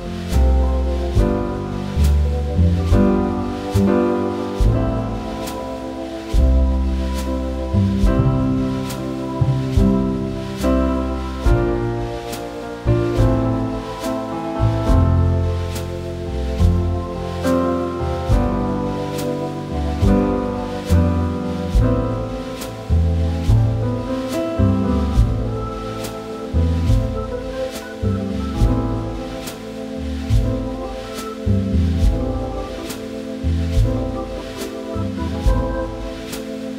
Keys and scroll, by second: 26.4 ctrl+c, 26.8 ctrl+v.